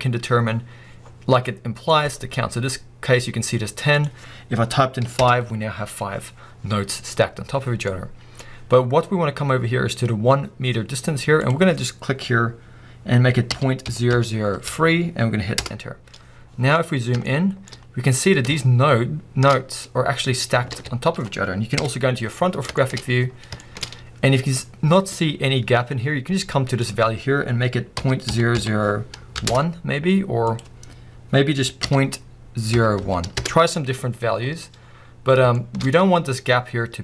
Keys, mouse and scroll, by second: 1.0 scroll down 2, 1.5 middle click, 5.2 click, 5.8 Return, 6.4 scroll up 2, 15.6 0, 15.7 Return, 16.5-17.3 scroll up 4, 17.3-17.6 shift+middle drag, 17.7 middle click, 17.8-18.2 scroll up 2, 18.7-19.2 middle drag, 19.5 scroll down 2, 20.1 scroll up 1, 20.7 alt+a, 21.8 KP_1, 22.4-22.8 scroll down 2, 22.8 shift+middle drag, 23.0-24.9 scroll up 4, 23.6 shift+middle drag, 24.9-25.8 scroll up 1, 25.8-27.2 scroll up 1, 27.2-29.5 scroll up 1, 29.5 0, 32.5 Return, 33.4 click, 33.5 Return, 34.5 scroll down 1, 35.6 shift+middle drag, 35.8 scroll up 1.